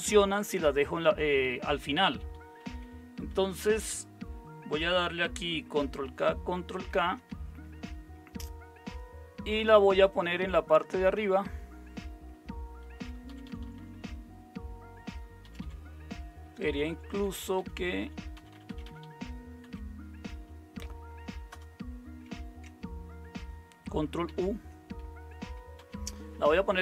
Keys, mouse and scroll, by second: 2.6 Up, 3.2 Right, 6.0 ctrl+k, 6.7 ctrl+k, 7.5 Up, 8.2 Up, 8.2 Up, 8.5 Up, 13.4 Down, 13.6 Down, 13.8 Down, 14.0 Down, 15.4 Down, 15.6 Up, 16.9 Up, 17.0 Up, 17.2 Up, 17.4 Up, 18.3 typing, 18.5 Down, 18.7 Down, 18.8 Down, 19.6 Down, 21.5 Up, 24.2 Return, 25.8 ctrl+u.